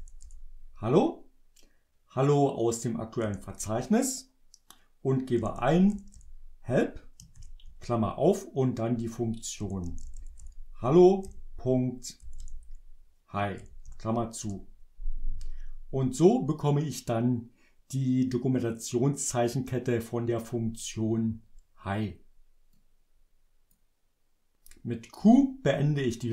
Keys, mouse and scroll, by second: 0.0-0.3 typing, 3.3 Return, 5.3-7.5 typing, 9.5-13.7 typing, 14.6 Return, 22.9 click, 25.1 q.